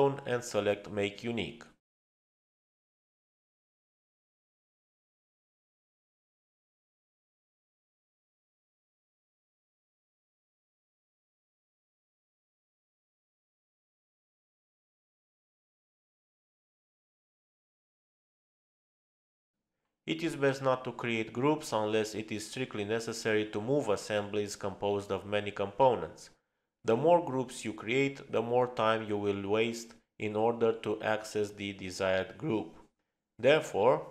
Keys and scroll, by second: 23.1 space.